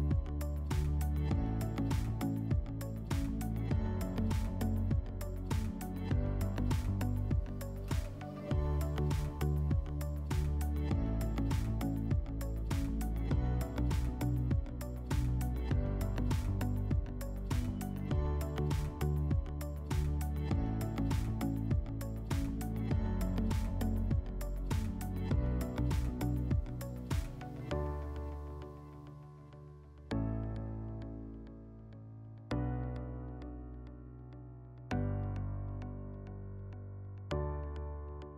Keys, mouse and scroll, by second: 0.9 click, 2.4 click, 3.1 click, 4.5 click, 5.6 click, 6.6 click, 7.7-9.2 drag, 9.2 r, 15.1-16.7 drag, 17.0 click, 17.8 click, 20.2 click, 25.5 click, 28.4 click, 30.8 click, 31.8 click, 36.1-37.7 drag.